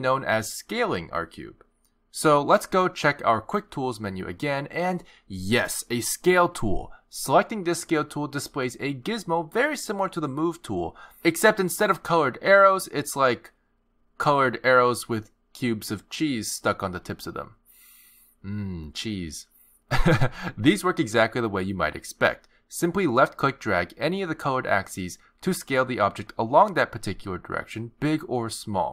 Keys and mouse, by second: 7.3 click, 23.6 click, 26.7 click.